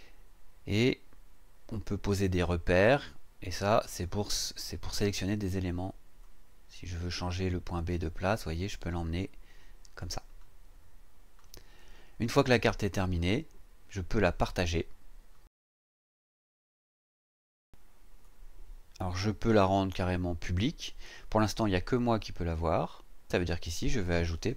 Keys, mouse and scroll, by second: 4.0 click, 6.2-10.2 drag, 16.3 click, 23.8 click.